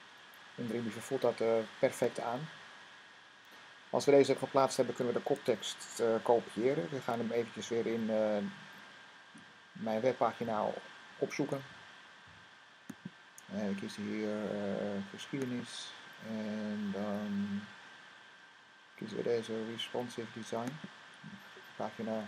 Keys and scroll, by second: 6.8 Tab.